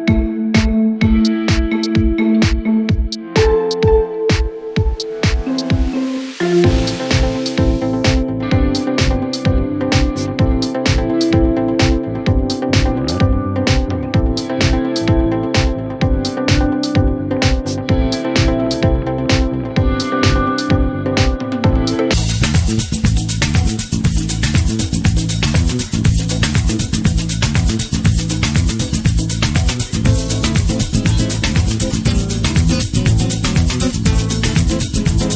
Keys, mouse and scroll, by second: 0.0 middle click, 1.9 click, 2.7 middle click, 3.9 scroll down 1, 4.4 middle click, 5.5 scroll up 1, 8.0-11.8 drag, 11.8 middle click, 13.2-14.2 middle drag, 14.2-28.8 drag, 17.0 shift+a, 28.8 shift+a.